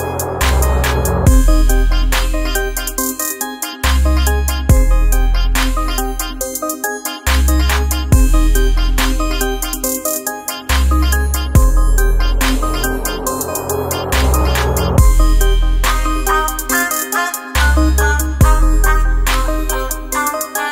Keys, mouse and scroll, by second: 0.1-2.3 typing, 2.9 Return, 4.3-5.3 typing, 9.4-13.4 typing, 15.2-16.6 drag, 16.6-20.7 drag.